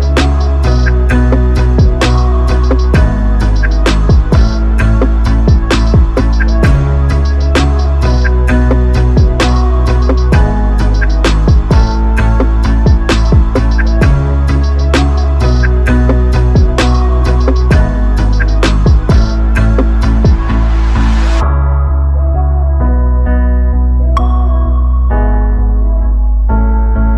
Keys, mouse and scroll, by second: 3.8 KP_3, 5.8-7.0 drag, 9.6 shift+s, 11.1 r, 18.5-20.8 drag, 21.2-22.3 drag, 24.0 KP_7, 25.3 shift+a.